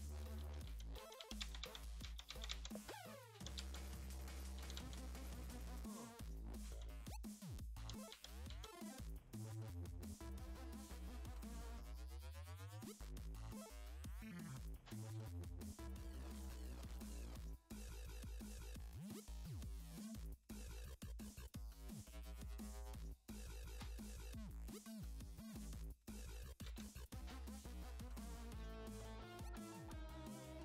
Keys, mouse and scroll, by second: 0.0-5.3 typing, 7.3-9.2 typing, 10.2-10.6 scroll up 4, 12.8 click, 14.6 click, 14.8 click, 16.7-17.5 scroll down 7, 18.1 click, 20.0 click, 21.1 middle click, 21.7-22.5 scroll down 8, 22.9 scroll down 2, 23.7 middle click, 25.4-26.2 scroll up 4.